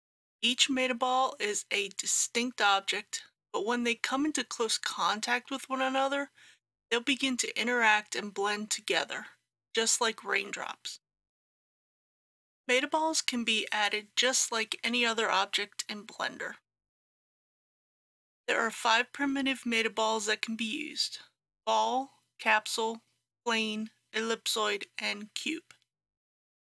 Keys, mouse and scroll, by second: 17.3 shift+a.